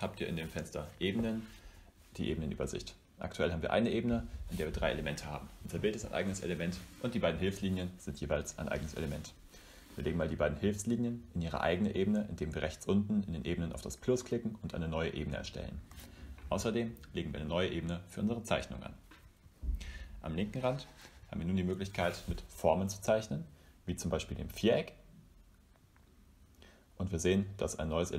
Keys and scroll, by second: 15.8-18.0 typing.